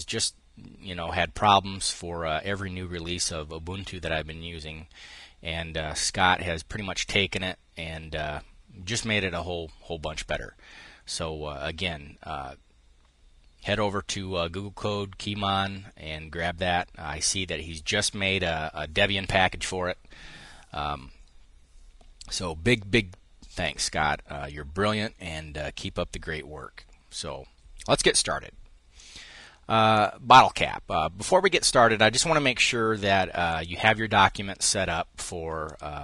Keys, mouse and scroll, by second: 28.6 click, 29.6 click, 33.2 click, 35.4 click.